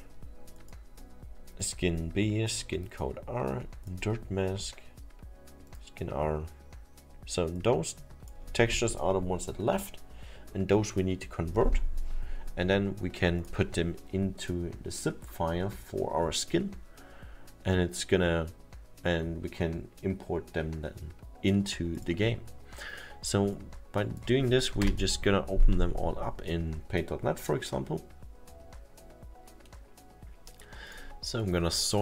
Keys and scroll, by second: 24.8 Return.